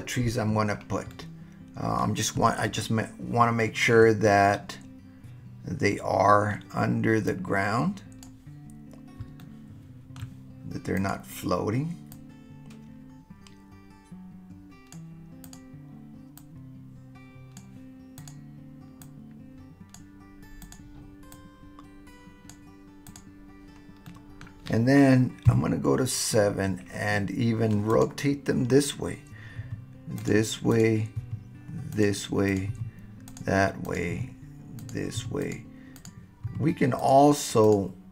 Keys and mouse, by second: 1.1-2.0 middle drag, 2.8-3.9 shift+middle drag, 4.2-6.5 middle drag, 7.3 click, 9.4-9.7 shift+middle drag, 9.7 shift+click, 9.7-10.2 shift+middle drag, 12.7 click, 13.6 click, 14.0 click, 16.4-17.6 drag, 18.2 click, 19.0-20.0 drag, 20.6 click, 21.4 click, 23.1 click, 24.0-24.5 middle drag, 25.4 KP_7, 25.5 middle click, 27.9 click, 29.6 r, 30.2 click, 30.7 click, 31.2 r, 31.9 click, 32.5 click, 32.7 r, 33.3 click, 34.2 r, 34.8 click, 35.2 r, 35.4 click, 36.0 click, 36.5 r, 37.0 click.